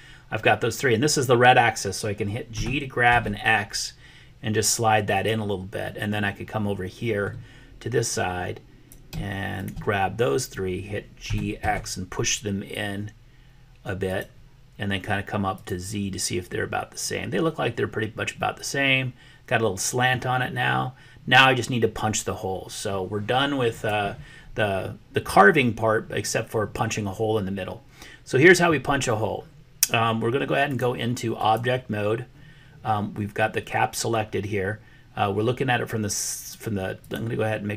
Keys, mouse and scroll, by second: 2.5 g, 5.9-7.0 middle drag, 7.0 click, 7.1 middle click, 8.1 click, 11.3 g, 15.5 click, 18.5-20.2 middle drag, 23.6 click, 30.8 click, 36.9 click.